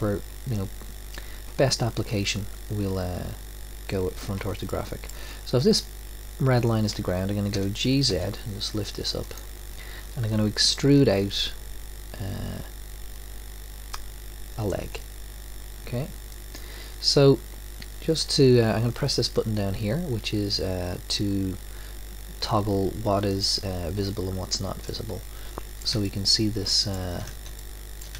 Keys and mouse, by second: 7.5 g, 11.1 e, 23.3-25.0 drag, 25.0-28.1 middle drag.